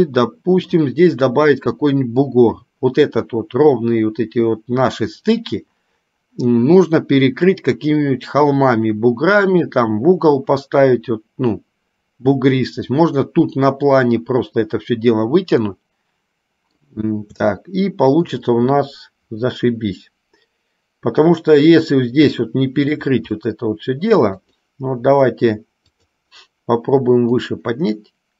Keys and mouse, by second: 0.0-1.0 middle drag, 15.8-17.1 middle drag, 17.8 shift+middle click, 22.6 shift+middle click, 23.7 middle click, 24.7 click, 26.1 click, 27.7-28.3 drag.